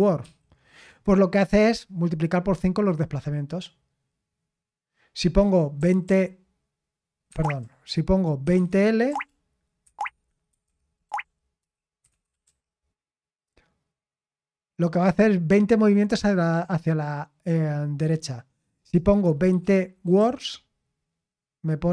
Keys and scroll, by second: 0.0-0.2 typing, 5.7 typing, 7.1-9.0 typing, 9.8 Escape, 10.0 Escape, 10.2-12.9 typing, 19.2-20.6 typing.